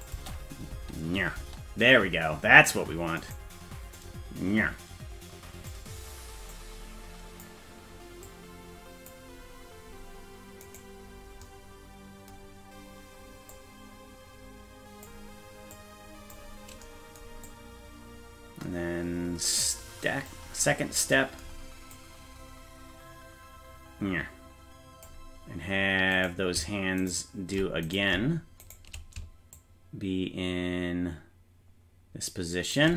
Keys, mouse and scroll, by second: 0.1 click, 0.8 space, 1.4 space, 3.3 right click, 4.0-5.8 drag, 6.5 click, 8.2 click, 10.7 right click, 13.5-15.1 drag, 15.8 click, 17.5-20.3 drag, 20.7-21.4 scroll down 3, 22.0-25.1 drag, 26.3 right click, 27.1 shift+right click, 28.0 right click, 28.7 shift+right click, 29.6-32.8 shift+drag.